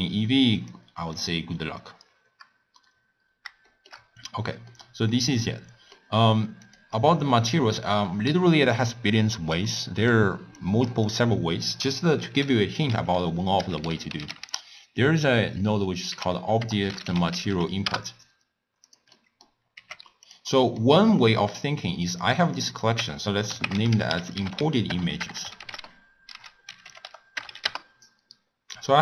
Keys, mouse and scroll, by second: 0.5-3.0 drag, 3.0-3.6 scroll down 3, 3.6 shift+middle click, 4.1-4.6 scroll up 1, 4.7-6.6 middle drag, 6.6 click, 7.6 middle click, 7.9-8.9 scroll up 4, 8.9-10.6 middle drag, 10.6 click, 12.1 ctrl+a, 19.1 middle click, 19.8 g, 20.5-22.1 middle drag, 22.1 click, 22.6 click, 22.7-25.3 drag, 25.3 BackSpace.